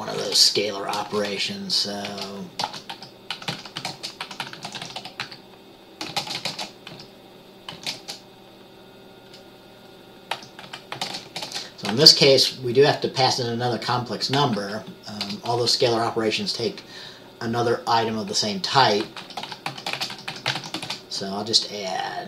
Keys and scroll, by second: 0.0-8.1 typing, 10.5-12.0 typing, 14.5-15.8 typing, 19.3-21.0 typing.